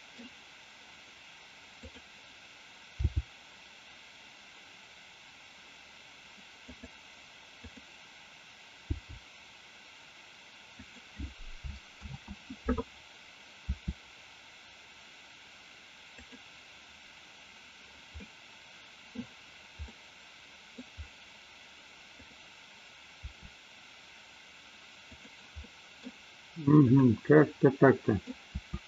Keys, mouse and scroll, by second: 1.7 click, 3.1 g, 7.6 click, 8.9 g, 12.4 ctrl+z, 13.7 r, 16.4 click, 18.2-19.2 middle drag, 19.9 middle click, 22.2 click, 23.2 r, 25.2 click, 25.7 middle click, 26.9 click, 27.7 middle click, 28.6 r.